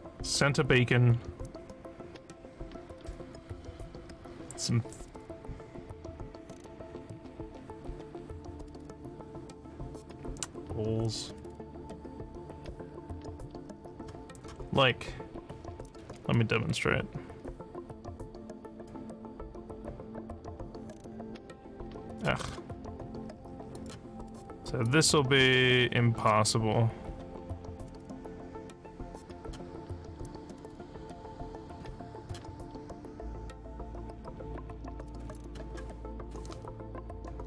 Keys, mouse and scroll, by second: 18.7 click, 21.1 click, 22.4 click, 23.7 click, 24.8-26.2 drag, 27.9-29.4 drag, 30.8-32.2 drag, 33.9-35.3 drag.